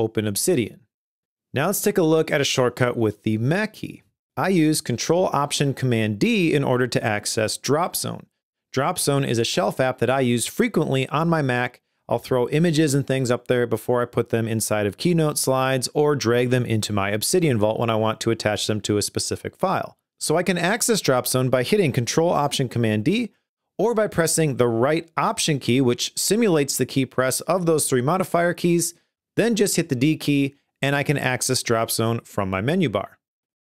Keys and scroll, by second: 30.1 ctrl+alt+super+d, 33.3 Escape.